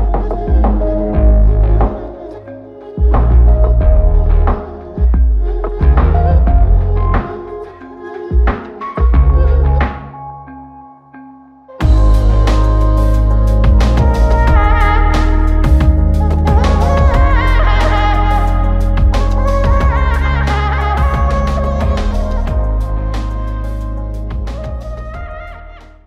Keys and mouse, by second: 0.9 alt+shift+click, 1.8 ctrl+alt+click, 9.0 ctrl+alt+click, 9.9 alt+shift+click, 11.5 ctrl+alt+click, 12.3 alt+click, 13.4 alt+shift+click, 14.1 ctrl+alt+click, 16.2 r, 22.2 f, 23.2 shift+click, 25.0 alt+click.